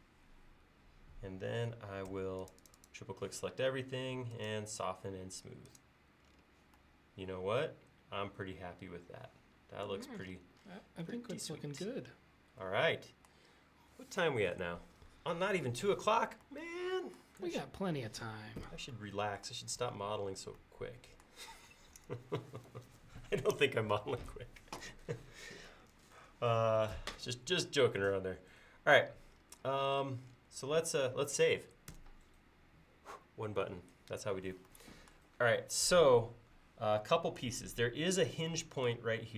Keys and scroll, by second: 2.1 space, 31.9 ctrl+s.